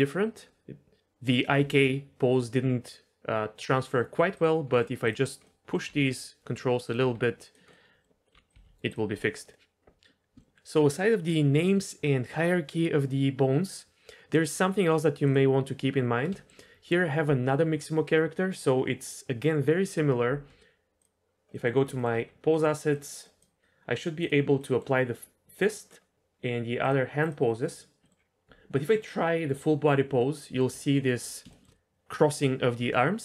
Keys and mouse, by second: 1.3 click, 1.6 g, 4.3 click, 4.7 middle click, 5.0 click, 5.4 middle click, 5.8 g, 7.0 r, 7.7 middle click, 8.2 middle click, 8.3 r, 8.5 r, 9.2 r, 10.4-13.3 shift+middle drag, 16.3-16.9 shift+middle drag, 21.5-21.9 middle drag, 22.9 middle drag, 23.2 drag, 24.2 click, 24.6-25.0 middle drag, 25.7 middle drag, 27.6 click, 28.0-28.6 middle drag, 30.2-30.6 middle drag, 30.8-31.4 shift+middle drag, 31.5 shift+middle click.